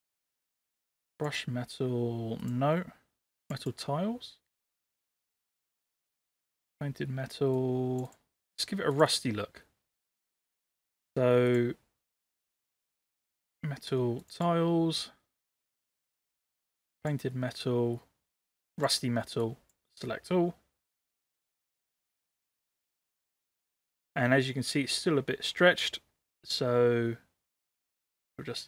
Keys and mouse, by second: 26.7-28.6 drag.